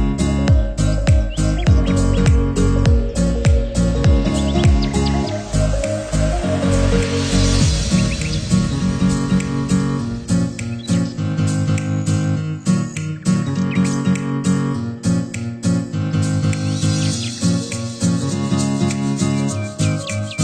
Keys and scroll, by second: 13.7 ctrl+-, 14.1 ctrl+0.